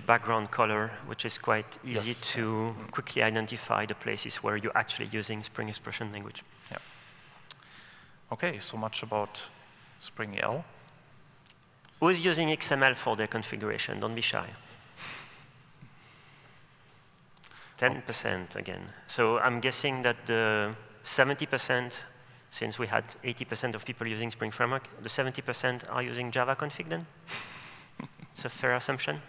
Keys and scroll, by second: 8.4 super+w, 10.5 super+w, 20.5 super+e.